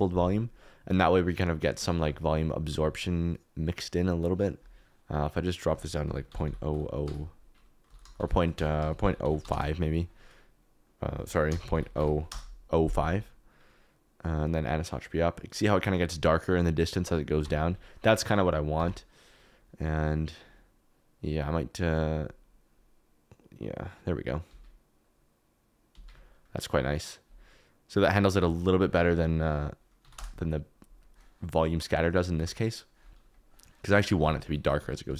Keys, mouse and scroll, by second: 1.7 click, 1.9 g, 2.6 g, 4.3 click, 5.5 click, 6.4 0, 7.9 BackSpace, 8.6 BackSpace, 8.7 BackSpace, 11.7 click, 14.4-15.4 drag, 17.4 Tab, 18.7 Tab, 20.3 click, 21.2 click, 28.1-30.1 drag, 32.1 click, 32.3 g, 34.2 Tab, 34.4 3, 34.7 g, 35.0 Escape.